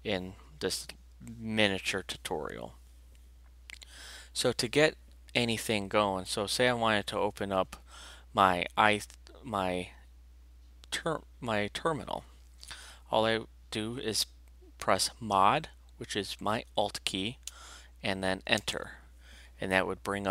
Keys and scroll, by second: 18.6 alt+Return.